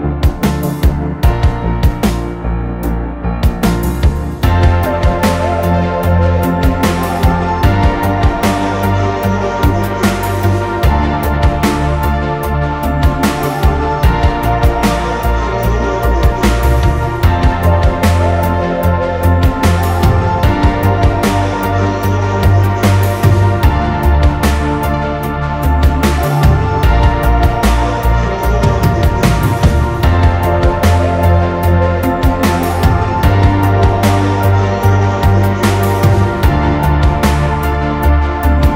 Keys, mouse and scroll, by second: 1.0 click, 1.6 ctrl+z, 6.5 scroll down 4, 12.1 typing, 13.1-16.8 typing, 17.9-18.9 typing, 23.5 Delete, 24.1 Delete, 27.3 Delete, 27.6 scroll down 1, 28.4 e, 30.9 typing, 33.4 typing, 34.5-37.6 typing.